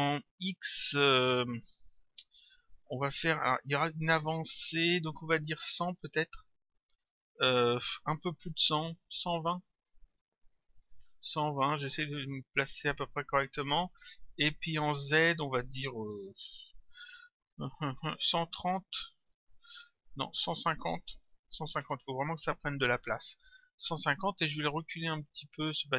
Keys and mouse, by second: 6.2 Return, 9.4 click, 11.3 Return, 14.7 click, 18.3 Return, 20.4 click, 22.0 Return, 25.6 click.